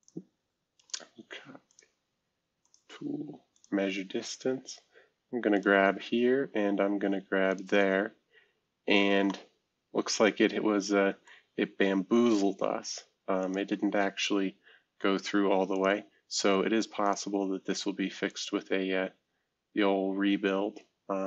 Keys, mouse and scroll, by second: 0.0 click, 0.8 click, 1.7 click, 2.6 click, 3.5 click, 5.5 click, 7.5 click, 8.7-9.3 scroll down 2, 9.3-12.7 middle drag, 14.6 scroll down 4, 15.7 click, 17.0 click, 18.3 click.